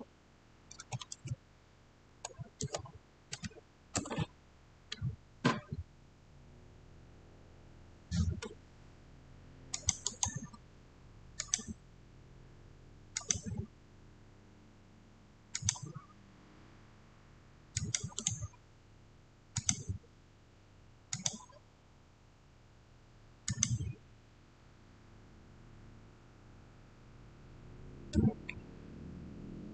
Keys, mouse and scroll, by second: 0.7 click, 0.7 typing, 1.9 Tab, 2.5-3.2 typing, 3.8 Return, 9.6 click, 9.9 right click, 11.3 click, 15.4 click, 15.4 click, 17.6 click, 18.0 right click, 19.4 click, 23.4 click.